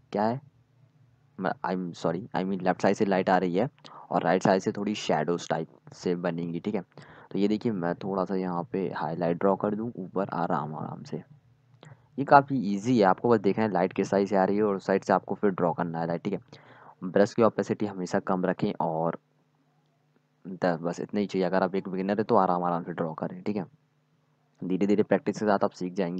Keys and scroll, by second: 1.9-3.5 typing, 5.1-6.2 typing, 7.4 x, 9.4 z, 20.0 z, 21.4 z, 25.4 z.